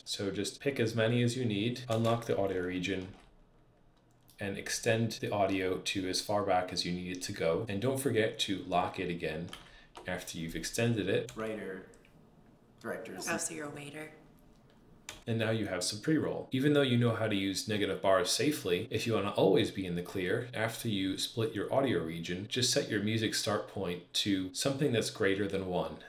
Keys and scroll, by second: 2.9 super+Page_Up, 9.4 super+Page_Down, 11.2 space, 14.9 space.